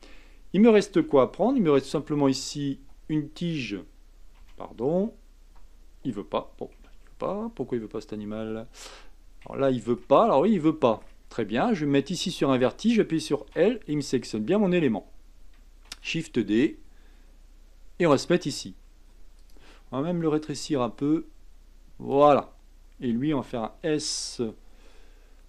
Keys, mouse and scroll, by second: 1.1 a, 2.9 l, 4.3 a, 5.5 l, 6.7 a, 7.2-9.5 scroll up 3, 9.5 shift+middle click, 10.2-10.7 scroll up 4, 10.7-13.4 shift+middle drag, 13.4 l, 13.9-15.9 scroll down 6, 15.9 shift+d, 20.5 s, 23.5 s.